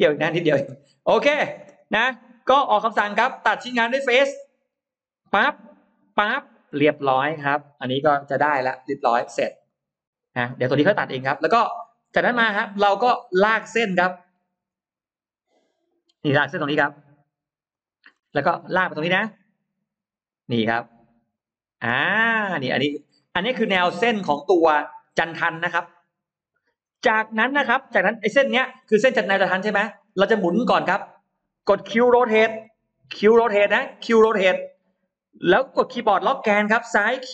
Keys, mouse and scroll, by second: 0.0 middle click, 1.0 click, 4.0 click, 5.1 click, 5.9 click, 6.8 space, 6.9 click, 7.2 click, 7.8 middle click, 8.0 scroll down 1, 8.6 Delete, 8.7-9.5 scroll down 2, 9.5 middle click, 10.3-10.6 scroll down 1, 10.8 scroll up 1, 11.4 middle click, 11.8 middle click, 12.6 middle click, 14.4 l, 17.6 click, 17.9 middle click, 18.4 middle click, 18.8 middle click, 21.2 click, 22.0 space, 22.4-23.0 scroll up 2, 23.0 middle click, 24.1 click, 25.0-25.6 scroll up 4, 26.4-28.4 scroll up 8, 28.0-29.6 middle drag, 29.8 scroll up 2, 30.1 middle click, 33.1 q, 37.2 Left.